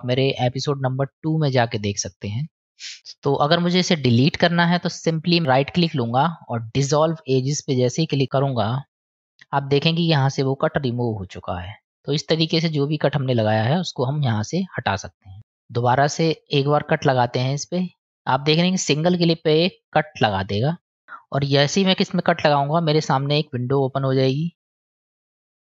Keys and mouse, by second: 5.5-8.6 right drag, 9.8-13.3 middle drag, 14.2-15.1 middle drag, 19.7 click.